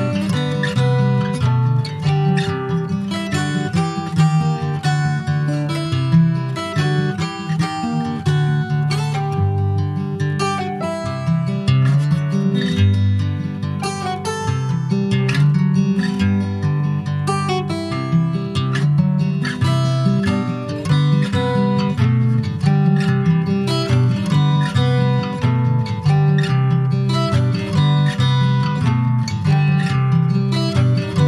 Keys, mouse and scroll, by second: 0.9 /, 2.1 alt+z, 3.1 Tab, 3.7 click, 4.3-4.7 scroll down 2, 5.7 2, 6.1 click, 6.6-7.4 scroll up 2, 7.8-9.1 drag, 10.5 alt+z, 10.9 middle click, 11.5 ctrl+s, 11.6 scroll down 3, 11.9-13.1 middle drag, 13.1 3, 13.2 click, 13.6-15.6 middle drag, 15.6 alt+shift+click, 16.1-17.4 middle drag, 20.4 click, 21.1-21.4 scroll up 1, 21.4-23.5 middle drag, 23.5 alt+s, 25.3 click, 25.9 ctrl+z, 26.8 ctrl+z, 30.4 alt+middle click, 30.5 alt+scroll up 1, 30.7 alt+middle click, 31.1 alt+z.